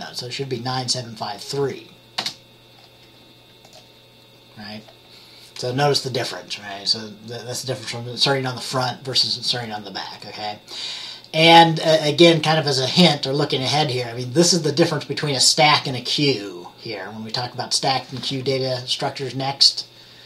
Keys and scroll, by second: 2.3 ctrl+z.